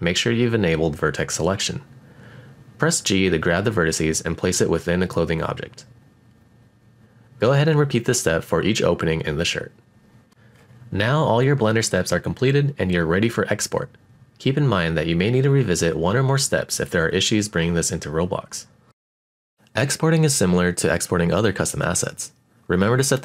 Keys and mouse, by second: 2.4 g, 2.8-4.0 middle drag, 4.0 click, 4.3 middle click, 4.9 shift+middle click, 5.1 shift+middle click, 5.4-6.7 typing, 5.5 click, 5.5 right click, 6.2 click, 6.2 middle click, 6.9 click, 6.9 middle click, 7.2 middle click, 7.4 shift+middle click, 7.7 alt+click, 7.9-10.6 typing, 8.0 click, 8.1 right click, 8.4 click, 8.5 middle click, 8.8 click, 8.9 shift+middle click, 9.0 middle click, 9.5 alt+click, 9.7 click, 9.8 right click, 10.1 click, 10.1 middle click, 10.2 shift+middle click, 10.4 shift+middle click, 10.5 shift+middle click, 10.7 click, 10.8 middle click, 10.9 shift+middle click, 11.1 shift+middle click, 11.2 click, 12.2 click, 12.6-13.2 drag, 13.9 click, 14.9 click, 16.0-18.9 middle drag, 19.9-23.2 drag.